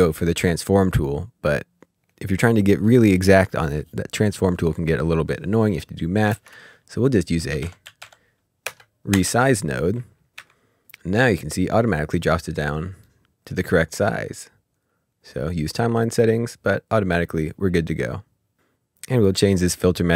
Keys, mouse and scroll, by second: 6.2 click, 6.3 ctrl+space, 7.5-8.6 typing, 9.1 Return, 11.3-11.9 ctrl+scroll up 2, 12.2 middle click, 15.3 middle click, 16.3 click, 19.1 click.